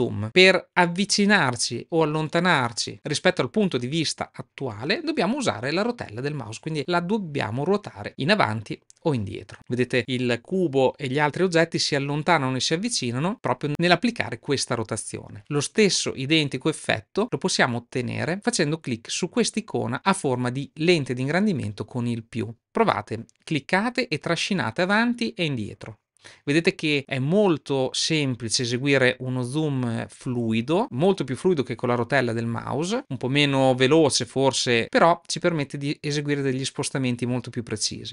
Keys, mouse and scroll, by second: 23.8-37.9 drag.